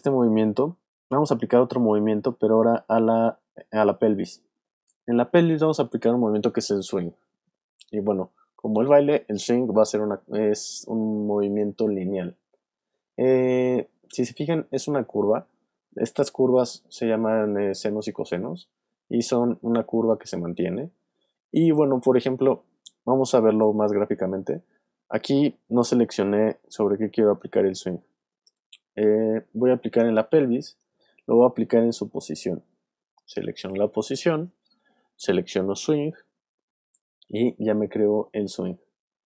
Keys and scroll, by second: 32.0 p.